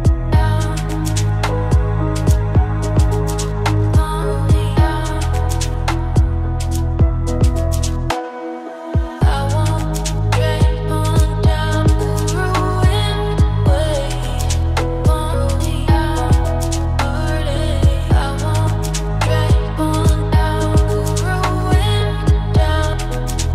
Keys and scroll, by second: 6.5 ctrl+d.